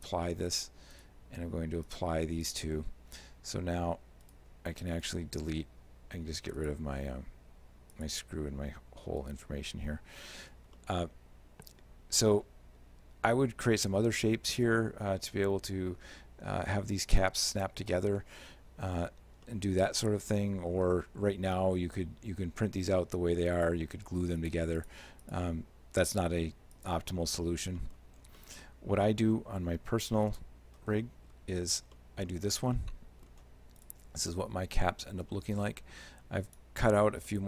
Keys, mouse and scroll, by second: 0.0 click, 1.0 right click, 1.9 click, 2.5 click, 4.3 right click, 5.0 right click, 6.6 shift+click, 8.0 shift+click, 9.3 right click, 10.3 h, 10.8 shift+middle click, 19.5 shift+middle click, 23.6 shift+click, 24.4 shift+click, 24.8 shift+click, 25.3 shift+click, 26.1 shift+click, 26.8 shift+click, 27.8 middle click, 28.2-28.6 scroll down 3, 28.4 middle click, 30.3 click, 31.1 middle click, 31.7-32.6 scroll up 4, 32.0 middle click, 32.8 middle click, 32.8-33.5 scroll up 1, 33.9 right click, 34.4 middle click, 35.3 g, 37.3 shift+middle click.